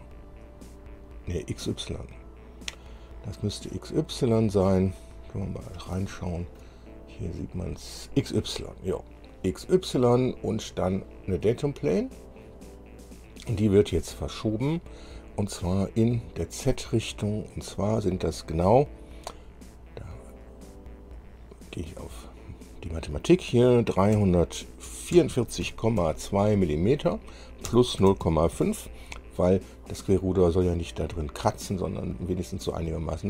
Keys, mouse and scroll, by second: 4.2 click, 5.2-6.2 middle drag, 6.3 shift+middle click, 7.2-7.5 shift+scroll up 1, 7.8 scroll up 1, 8.6-8.9 scroll down 1, 12.2 click, 14.0 click, 17.6 click, 21.3 click, 24.3-26.2 typing, 27.8 KP_Add, 28.4 KP_0, 28.4 KP_Decimal, 28.7 KP_5.